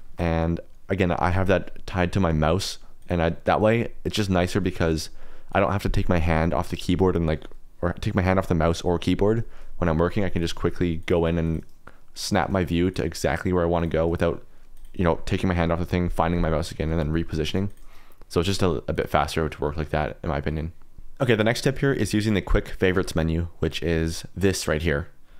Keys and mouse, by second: 0.0 shift+middle click, 2.9 click, 3.5 KP_Decimal, 5.5 click, 6.6 click, 10.3 click, 10.5-14.0 typing, 11.0 click, 11.4 click, 12.2 click, 12.6 middle click, 12.8 click, 13.1 click, 13.7 click, 14.7 click, 17.6 click, 17.8 KP_Decimal, 18.9 click, 19.1 KP_Decimal, 20.4 middle click, 20.5 click, 23.9 q.